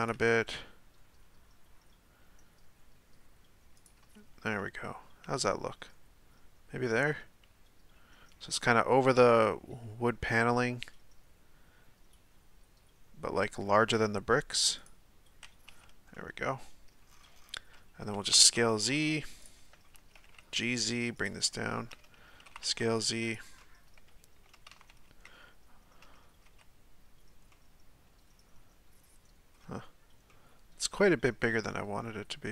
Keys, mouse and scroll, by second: 0.1 g, 5.2 g, 9.6 g, 15.8 z, 16.1-17.1 middle drag, 17.1-18.2 scroll down 6, 18.2 s, 20.1 g, 21.5-22.5 shift+middle drag, 22.5 s, 23.7-24.7 middle drag, 24.7 a, 24.9 a, 25.3-26.6 middle drag, 26.6 z, 27.5-29.6 middle drag, 29.6 z, 30.3-32.5 middle drag.